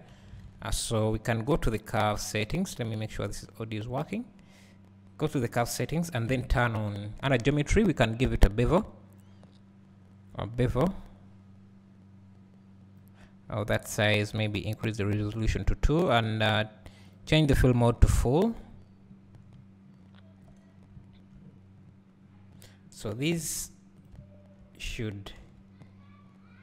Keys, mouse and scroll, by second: 11.2-24.1 drag, 18.7 scroll up 1, 20.8 scroll down 1, 22.5 scroll up 1, 23.0 scroll down 1, 23.4 Tab, 25.4 e.